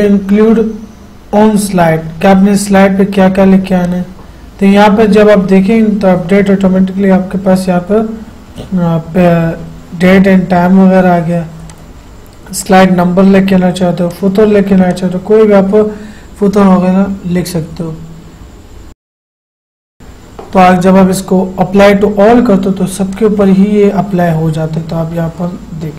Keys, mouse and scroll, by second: 4.0 click, 11.8 click, 17.3 typing, 18.8-20.4 typing, 23.3 click.